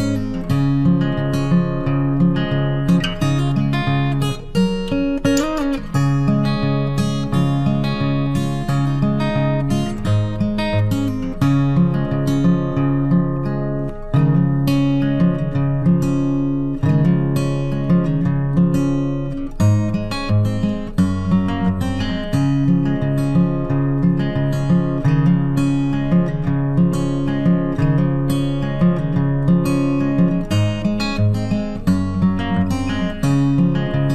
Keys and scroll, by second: 24.1 ctrl+t.